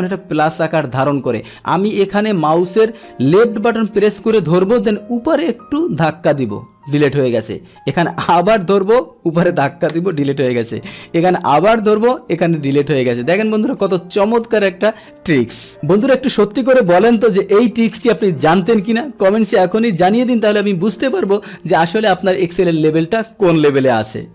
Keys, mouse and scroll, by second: 0.0-3.8 middle drag, 3.9-6.0 drag, 7.6 click, 8.2-9.4 drag, 10.1 click, 11.4-12.7 drag.